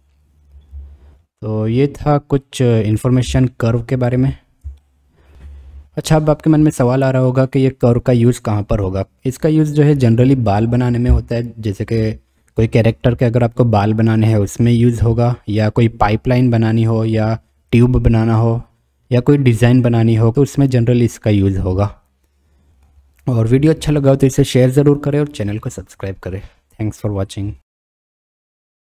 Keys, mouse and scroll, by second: 2.5 middle click, 4.9-5.2 shift+middle drag, 20.6-22.7 middle drag, 22.7 click, 24.6-25.2 drag.